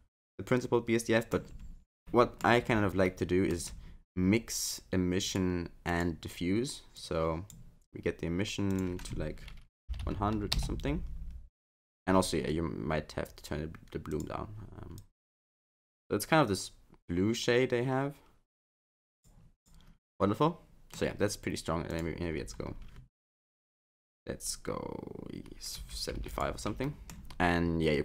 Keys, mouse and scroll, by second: 5.3 click, 5.9 click, 8.7 click, 10.0 0, 14.1 click, 19.6 click, 20.1 middle click, 21.9 click, 26.9 middle click.